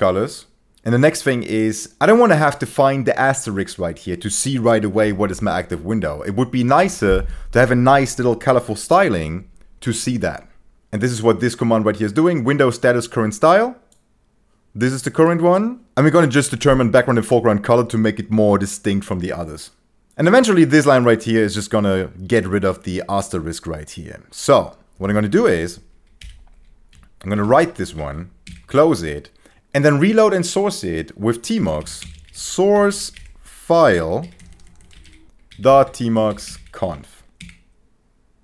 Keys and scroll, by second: 26.2 Escape, 27.1-28.4 typing, 28.5 Return, 29.5 ctrl+BackSpace, 31.3-37.0 typing, 38.3 Return.